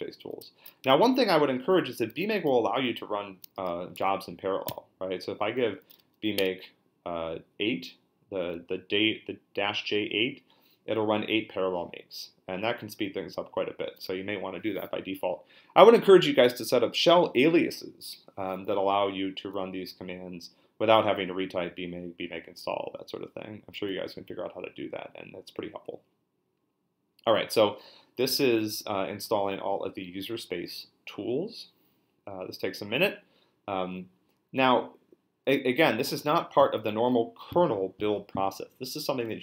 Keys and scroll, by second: 0.8 -, 2.1 4, 4.0 BackSpace, 4.7 8, 6.4 Return.